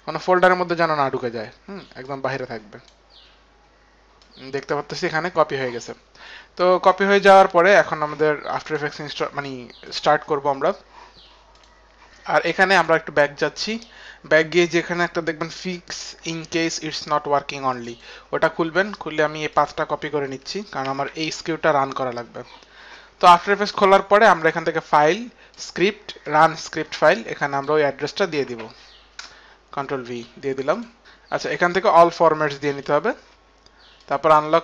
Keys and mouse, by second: 3.5 click, 4.2 click, 5.4 click, 6.2 click, 11.5 click, 12.7 click, 17.7 click, 17.9 click, 19.5 click, 20.8 ctrl+c, 21.0 click, 21.9 ctrl+c, 21.9 click, 23.8 ctrl+c, 24.2 ctrl+c, 24.4 click, 26.7 click, 27.8 click, 28.5 ctrl+v, 28.5 click, 29.2 Return, 29.2 ctrl+v, 29.2 click, 29.3 Return, 29.3 ctrl+v, 29.3 click, 30.7 Return, 30.7 ctrl+v, 30.7 click, 32.8 click, 34.3 click.